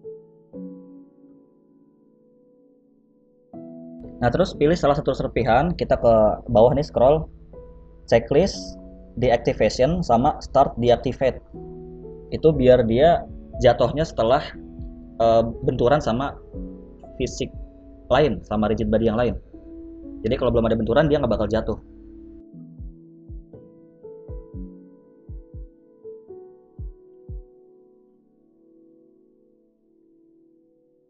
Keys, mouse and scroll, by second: 1.3 space, 2.7 click, 3.6 middle click, 4.9 right click, 5.4 right click, 5.9-6.8 scroll down 4, 6.9 click, 6.9-7.2 scroll down 5, 7.8 scroll down 2, 8.5 click, 9.3 click, 9.3-10.3 scroll down 4, 10.3 click, 12.3 right click, 14.3 click, 17.8 click, 22.8 a, 22.9 a, 23.2 right click, 25.7 click, 26.0 space, 30.1 space, 30.3 middle click.